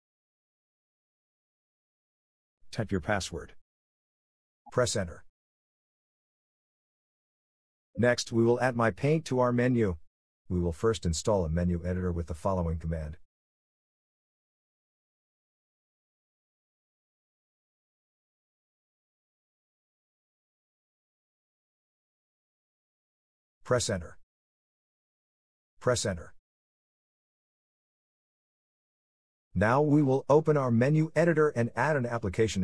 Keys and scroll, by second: 0.0 Return, 3.5-5.1 typing, 5.3 Return, 24.2 Return, 26.9 Return.